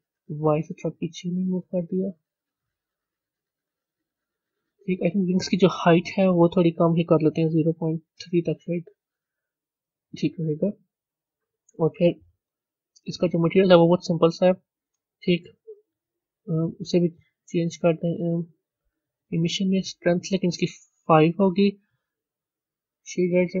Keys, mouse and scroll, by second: 3.7-8.5 middle drag, 8.5-9.8 drag, 9.8-11.5 middle drag, 11.5-13.0 scroll down 1, 13.0 click, 15.1 click, 19.2-23.6 drag.